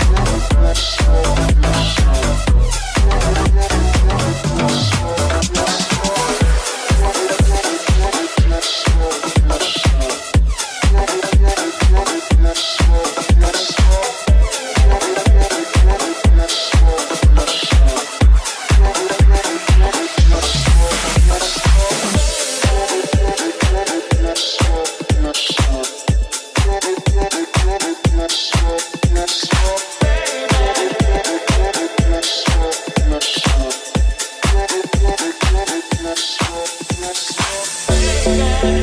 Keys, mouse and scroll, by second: 1.9 right click, 3.2 e, 5.0 g, 5.5 r, 6.2 r, 6.3 g, 7.9-11.0 middle drag, 7.9 w, 10.7 1, 11.0-13.0 alt+middle drag, 11.5 alt+z, 13.0 right click, 13.1 middle click, 14.0 shift+right click, 14.0-18.0 alt+shift+middle drag, 14.2 alt+z, 14.7 s, 18.0 right click, 18.0-27.2 ctrl+middle drag, 21.0 e, 21.7 s, 22.2 g, 22.6 s, 24.8 right click, 25.1 s, 26.5 3, 27.2 right click, 27.2-34.5 middle drag, 27.5 s, 28.4 e, 29.7 s, 32.7 right click, 33.2 right click, 33.7 j, 34.0 right click, 34.5 right click, 34.7 j, 35.0 right click, 35.7 g, 37.1 right click, 37.6-38.8 middle drag, 37.6 g.